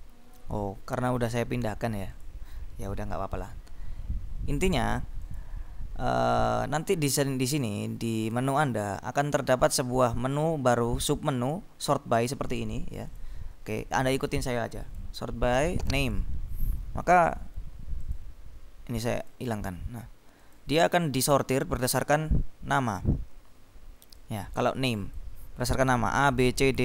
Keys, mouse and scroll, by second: 2.2 click, 5.4 click, 13.2 click, 15.0 click, 16.0 click, 16.8-17.4 scroll up 2, 18.2 click, 19.2 click, 20.5 click, 21.9-22.6 scroll down 1, 22.6-23.6 scroll up 1, 24.6 click, 25.7-26.7 scroll down 2, 26.7-26.8 scroll down 1.